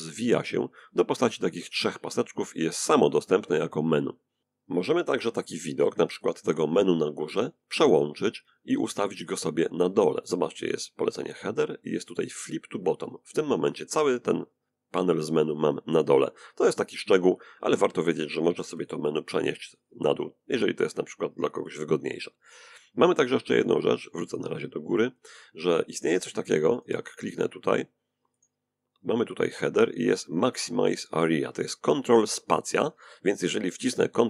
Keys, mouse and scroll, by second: 0.2 click, 3.9 right click, 7.4 right click, 11.7 click, 17.4 right click, 22.8 click, 25.4 right click, 27.0 right click, 33.0 ctrl+space.